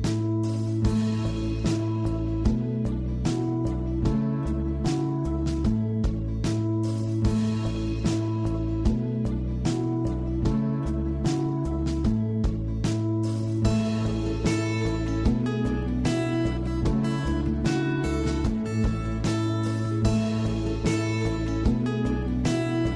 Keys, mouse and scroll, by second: 3.2-3.5 scroll up 2, 3.5 shift+middle click, 3.8 scroll up 1, 3.8-5.3 middle drag, 5.3-5.6 scroll down 4, 5.6-6.8 middle drag, 6.8 click, 8.4 shift+a, 11.7-14.7 drag, 14.8 scroll down 2, 15.1-15.6 middle drag, 15.6-17.9 scroll down 1, 17.9 click, 19.4-21.3 middle drag, 21.3 click, 21.9 click, 22.4 drag.